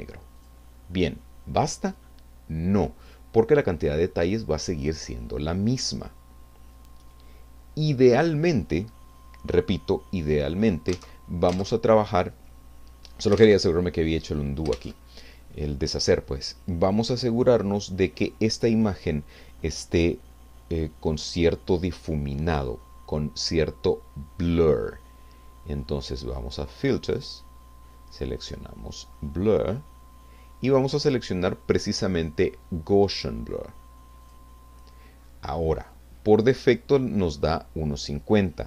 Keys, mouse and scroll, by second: 0.4 click, 10.9 alt+Tab, 13.4 alt+Tab, 14.7 alt+Tab, 27.1 click, 34.2 click.